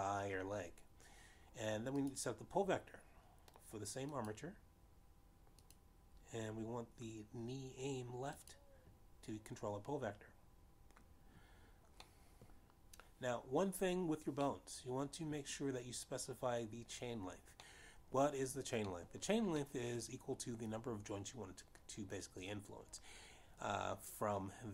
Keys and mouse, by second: 3.8 click, 6.0 click, 7.5 click, 10.3 click, 13.9 middle click, 16.4 middle click, 19.5 middle click, 20.9 middle click, 21.4 middle click.